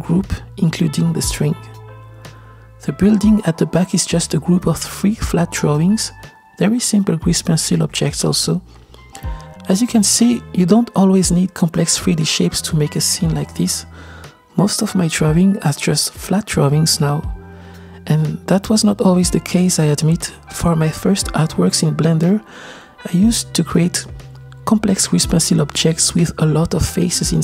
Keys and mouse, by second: 0.7 drag, 2.2-3.3 middle drag, 3.7-4.8 shift+middle drag, 5.1 shift+middle click, 6.5-11.6 middle drag, 11.8 KP_0, 13.2 click, 16.2-16.6 middle drag, 16.6-17.2 drag, 16.6-17.2 right drag, 18.2-19.3 middle drag, 19.7-21.2 shift+middle drag, 22.1-22.7 shift+middle drag, 23.2-24.3 middle drag.